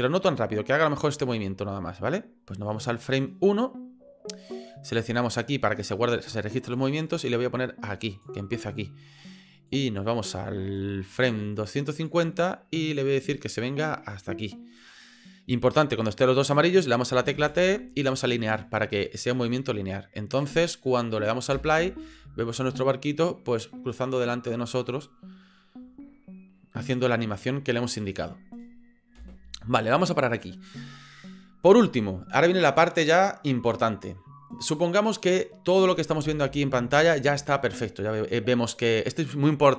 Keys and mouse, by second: 7.0-8.3 drag, 9.7-12.1 drag, 13.1-14.5 drag, 17.4 t, 19.2-21.0 drag, 21.5 space, 29.3 space, 35.2 click, 36.2 space.